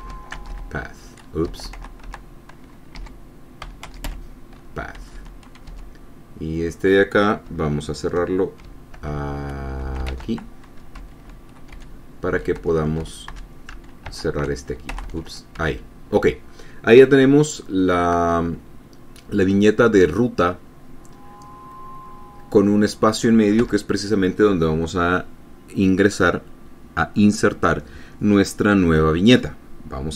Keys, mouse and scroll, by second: 0.1-2.0 typing, 1.9 Caps_Lock, 3.4-5.0 typing, 5.4 Up, 6.1 Home, 6.1 End, 9.5 shift+<, 10.2 BackSpace, 10.5 shift+<, 11.4 Home, 12.2 Down, 13.0 Right, 13.7 Left, 14.5 shift+<, 15.3 BackSpace, 15.5 <, 16.0 Up, 24.0 Tab.